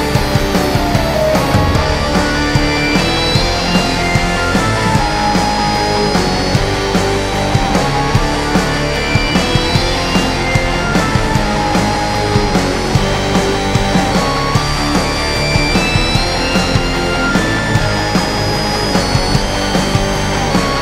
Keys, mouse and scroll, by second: 1.1 click, 9.0 click, 9.4 shift+m, 17.0-20.8 drag.